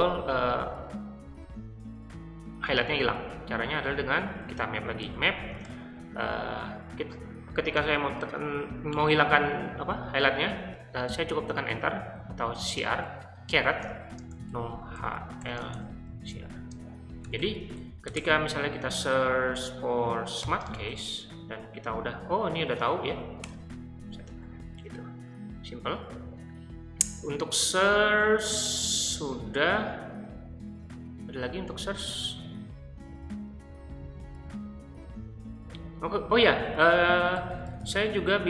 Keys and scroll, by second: 4.1-5.8 typing, 11.6-19.1 typing, 20.4 *, 23.4 Return, 36.8-38.4 typing.